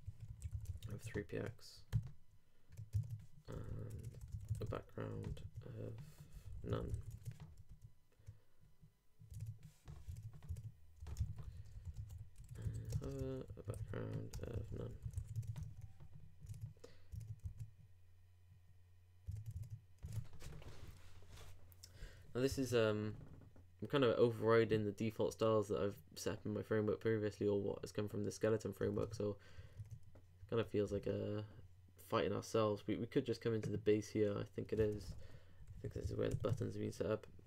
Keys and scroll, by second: 0.7 super+;, 0.9 super+Tab, 1.9 super+r, 2.9 super+Tab, 3.5 super+], 6.9 super+;, 7.1 super+Tab, 7.7 super+r, 9.4 super+Tab, 11.0 super+Return, 11.0-13.0 typing, 13.2 shift+Return, 15.1 super+;, 15.3 super+Tab, 15.6 super+r, 16.5 super+Tab, 17.5 super+r, 19.3 super+Tab, 22.5 super+Tab, 29.0 super+Tab, 30.9 super+Tab, 35.1 super+b.